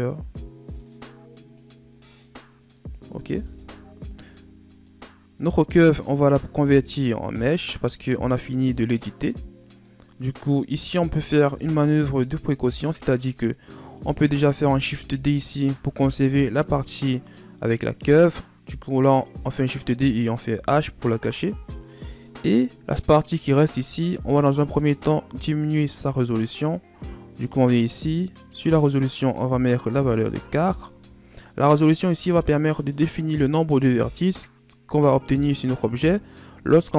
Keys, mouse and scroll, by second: 1.9 scroll down 3, 2.1-3.2 middle drag, 3.2 KP_1, 4.8-6.5 middle drag, 6.5 KP_1, 7.5 scroll down 2, 8.6-9.4 scroll up 6, 9.4-9.7 scroll down 2, 9.7-11.5 middle drag, 11.5 KP_1, 12.8-13.7 scroll up 6, 13.7 right click, 14.8 shift+d, 20.4 h, 21.4 right click, 22.8-24.0 scroll down 1, 25.8 click, 29.1-32.1 drag, 35.4-36.9 scroll down 2.